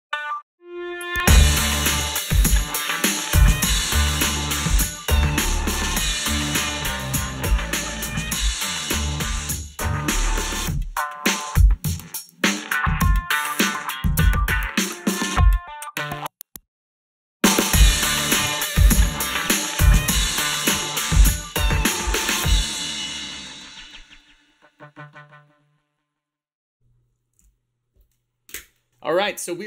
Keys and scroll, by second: 27.4 ctrl+s.